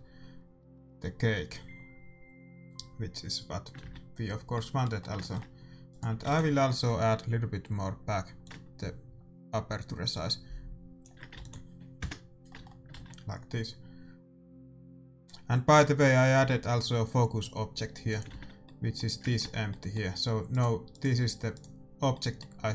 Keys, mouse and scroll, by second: 3.3-5.9 middle drag, 3.9 shift+z, 5.9-8.4 right drag, 6.2 ctrl+s, 8.4-10.2 drag, 11.3 ctrl+s, 11.9 KP_0, 12.5-14.5 middle drag, 14.3 shift+z, 18.2-19.6 drag, 18.4 shift+z, 18.8 middle click, 19.6-21.7 middle drag, 21.1-22.7 right drag.